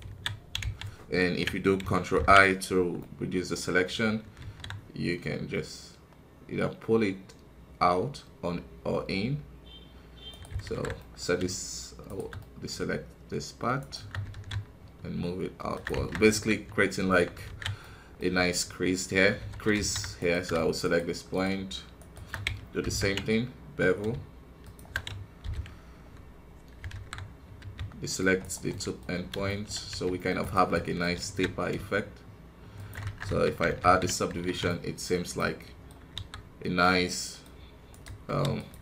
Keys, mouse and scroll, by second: 0.0 alt+a, 2.1 ctrl+KP_Subtract, 2.9-4.3 middle drag, 4.3 s, 10.6 alt+KP_1, 10.9-12.0 middle drag, 12.0 shift+right click, 12.3-13.7 middle drag, 13.7 shift+right click, 14.2 alt+s, 16.1 scroll down 4, 16.2 KP_1, 16.7 scroll up 1, 17.0 Tab, 17.8 middle click, 18.6-19.7 scroll up 1, 19.7 alt+KP_2, 20.1-22.8 right drag, 22.8 ctrl+b, 25.4 ctrl+KP_Subtract, 26.9 alt+KP_1, 27.2-27.5 scroll up 1, 27.5 c, 28.6 middle click, 29.1 scroll down 2, 29.4 shift+middle click, 29.8 c, 30.7 middle click, 31.2 alt+s, 33.2 KP_1, 33.4-33.8 scroll down 1, 33.8 ctrl+d, 34.6-36.1 middle drag, 36.1 KP_1, 36.3 scroll down 1, 36.8-38.2 middle drag, 38.2 w, 38.7 KP_1.